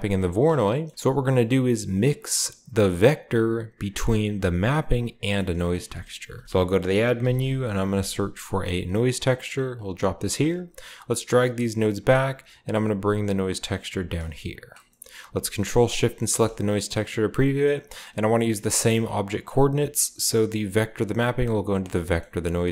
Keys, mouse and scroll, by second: 0.1 click, 0.5-1.9 scroll down 1, 0.9-2.1 drag, 4.2 click, 5.3 middle drag, 5.5-6.2 shift+drag, 6.0-7.3 typing, 8.8 click, 9.7 click, 10.3-12.0 drag, 11.0 typing, 12.1 click, 12.1 typing, 13.0 drag, 13.6 click, 13.7-14.2 typing, 14.1-14.4 drag, 14.6-16.1 drag, 14.8-17.5 middle drag, 15.0-16.1 scroll up 1, 16.1-17.4 ctrl+shift+scroll up 1, 16.2-17.5 ctrl+shift+drag, 20.4-21.7 drag, 22.0-22.7 scroll up 2.